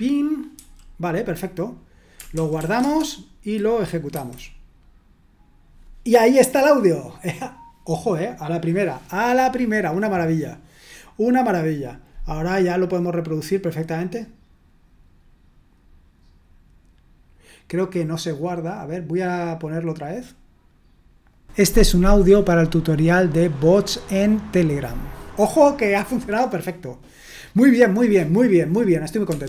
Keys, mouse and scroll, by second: 2.6 w, 2.8 Return, 4.1 F5, 12.1-13.9 drag, 19.4 click, 21.3 click, 27.7 click, 29.2 Escape.